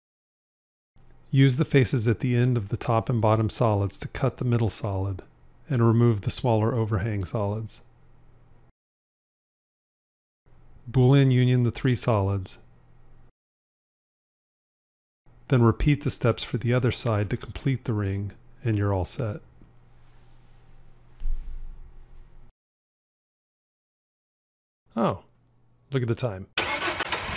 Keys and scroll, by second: 11.6 q.